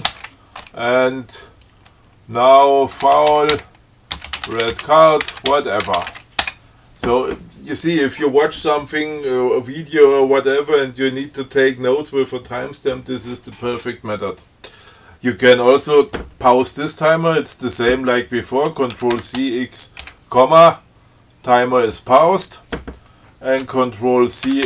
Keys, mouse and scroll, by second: 0.4 alt+Return, 3.1-6.9 typing, 19.3 ctrl+c, 19.4 ctrl+x, 20.3 ,.